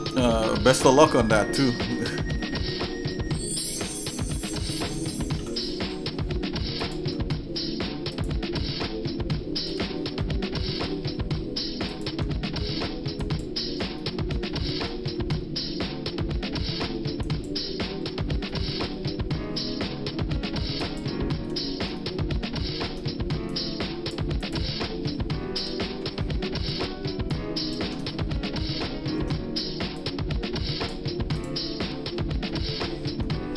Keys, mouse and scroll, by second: 0.1 shift+click, 0.9 shift+middle click, 1.4 middle click, 1.8 shift+middle click, 2.4 middle click, 3.1 shift+middle click, 5.2 shift+d, 7.3 middle click, 8.1 click, 9.7 g, 13.2 ctrl+right click, 14.0 middle click, 14.6 middle click, 17.2 ctrl+right click, 18.5 middle click, 20.8 ctrl+right click, 21.9 shift+middle click, 23.5 click, 23.8 ctrl+click, 24.4 click, 25.5 g, 28.1-29.2 shift+middle drag, 30.0-31.0 drag, 31.5 click.